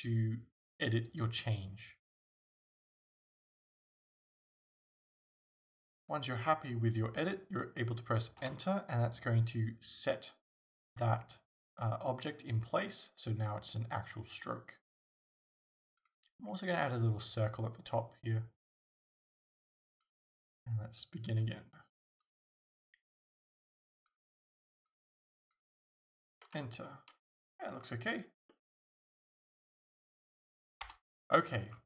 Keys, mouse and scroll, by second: 8.5 Return, 16.0 click, 17.5 click, 17.7 click, 18.7-20.1 shift+middle drag, 20.1 click, 26.6 Return, 27.5 Return, 27.6-28.5 scroll down 2, 28.5-31.8 middle drag, 30.9 KP_0, 31.7 scroll down 1.